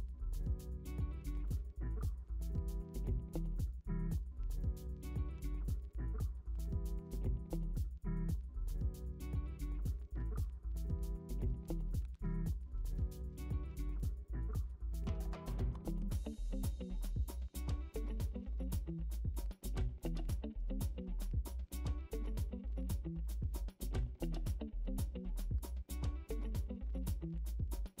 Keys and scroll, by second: 2.9 ctrl+z, 5.6 ctrl+z, 20.0 ctrl+z.